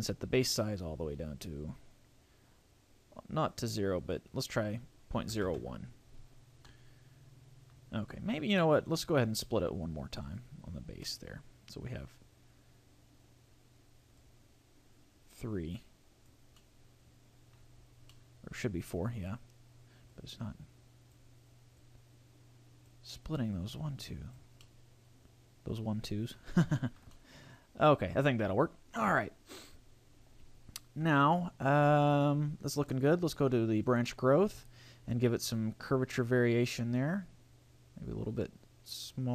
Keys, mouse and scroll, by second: 0.3 click, 4.0 click, 6.6 middle click, 10.2 click, 11.0 middle click, 14.2 click, 16.6 middle click, 17.8-18.3 scroll up 3, 18.1 middle click, 20.0 click, 21.8 click, 23.5 click, 24.6 middle click, 26.4 scroll down 3, 26.8 shift+middle click, 27.0 scroll up 1, 27.2 middle click, 32.8 click, 35.8 click.